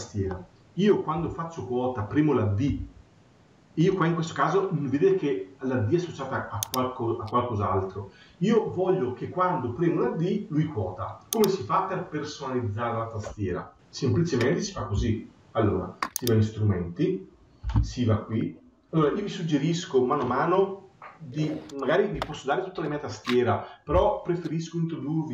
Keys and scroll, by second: 1.1 Escape.